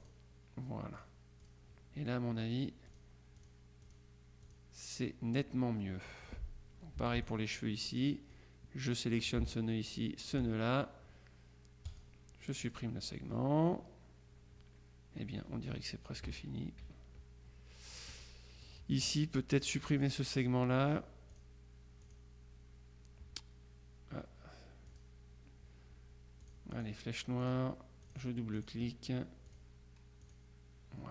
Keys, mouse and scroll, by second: 0.1 click, 1.0-2.0 drag, 3.0-5.1 drag, 5.9 click, 7.0 F2, 7.3 click, 8.4-9.6 drag, 10.0 shift+click, 11.0-13.3 drag, 16.3 KP_Subtract, 18.3 click, 19.6-20.6 drag, 21.4 click, 22.2 click, 25.0 click, 26.5 click, 27.5 click, 29.0 click, 29.6 click, 30.3 click.